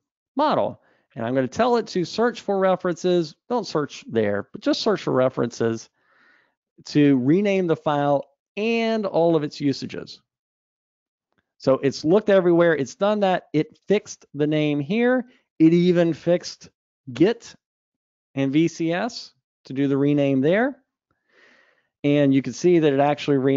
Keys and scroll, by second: 23.1 super+Up.